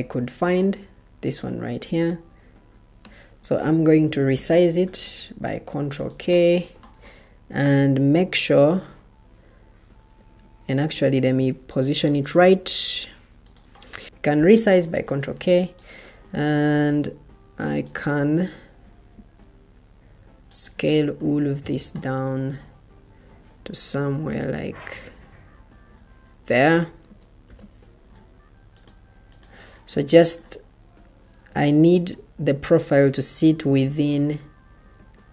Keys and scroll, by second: 4.2 ctrl+k, 6.5 ctrl+k, 10.0 Escape, 11.1 ctrl+d, 14.0 ctrl+t, 14.3 ctrl+k, 27.4 ctrl+k.